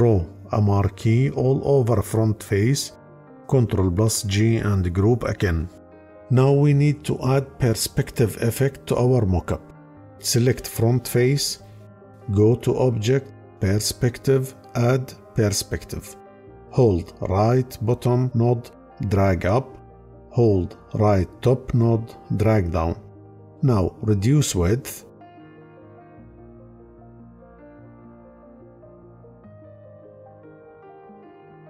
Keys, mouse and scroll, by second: 3.4 ctrl+g.